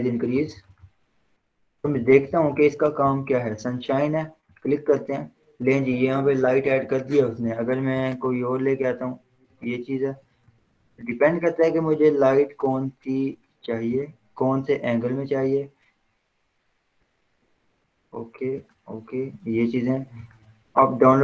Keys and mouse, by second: 0.0-2.1 typing, 4.9 click, 7.4 click, 7.7 ctrl+z, 8.2 click, 10.6 ctrl+z, 12.2 click, 13.5 click, 16.5 ctrl+z, 17.3 click, 19.7 ctrl+z, 20.5 click.